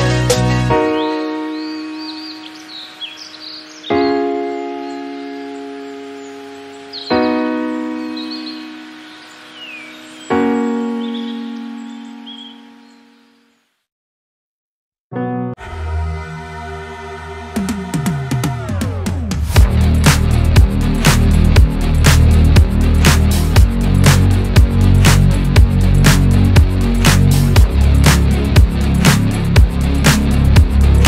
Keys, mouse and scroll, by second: 0.4-1.0 middle drag, 1.0-1.4 scroll down 5, 1.4 click, 1.8-2.2 shift+middle drag, 2.2 scroll down 1, 2.3-3.1 middle drag, 3.1 scroll up 1, 3.3-4.0 shift+middle drag, 4.0 click, 4.5 /, 4.9 KP_1, 8.0 shift+middle drag, 8.2 scroll up 4, 8.5 shift+middle click, 8.8 Tab, 9.3 shift+middle click, 9.8 scroll up 1, 10.1-11.8 shift+middle drag, 11.8 scroll up 1, 12.1-14.8 shift+middle drag, 14.8 scroll down 1, 15.1 shift+middle click, 15.8 3, 15.9 alt+z, 18.4 click, 18.8 scroll down 1, 19.1-21.8 shift+middle drag, 21.8-26.9 drag, 26.9 Tab, 27.6-28.0 shift+middle drag, 28.0 click, 28.1 Tab, 29.5 click.